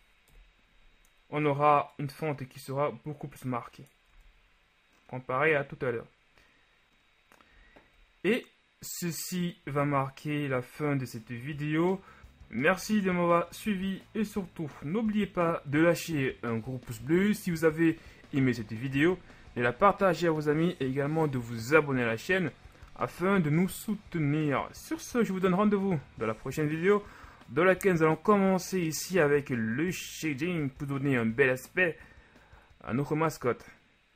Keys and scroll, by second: 0.4 KP_1, 4.3 Tab, 9.8 z, 12.8 z.